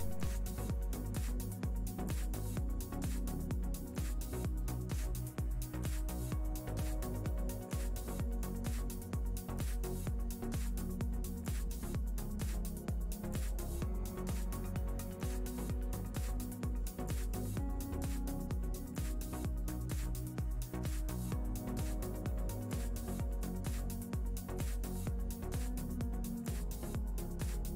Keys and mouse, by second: 0.3 click, 0.8 click, 3.3 middle click, 5.9 alt+d, 8.4 ctrl+middle click, 8.8 middle click, 9.5 middle click, 10.4 click, 12.1 x, 12.2 middle click, 12.7 middle click, 13.9 ctrl+middle click, 14.5 click, 15.0 g, 15.9 middle click, 16.9 middle click, 17.7 KP_7, 18.7 ctrl+middle click, 19.5 shift+middle click, 20.5 middle click, 21.3 shift+middle click, 21.7 ctrl+middle click, 22.3 click, 23.8 alt+d, 25.7 middle click, 26.7 middle click, 27.5 middle click.